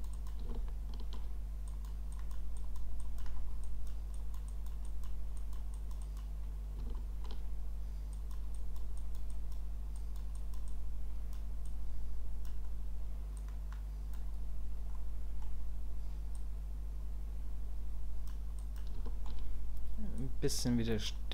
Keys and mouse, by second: 0.1 click, 0.6 shift+middle click, 1.7 click, 2.1 click, 2.6 click, 3.0 click, 3.6 click, 4.1 click, 4.5 click, 4.8 click, 5.4 click, 5.7 click, 6.0 click, 6.9 shift+middle click, 8.2 click, 8.6 click, 9.0 click, 9.4 click, 10.0 click, 10.3 click, 10.7 click, 11.6 click, 13.4 click, 14.9 middle click, 16.3-18.3 drag, 18.6 click, 19.1 shift+click, 20.2 click.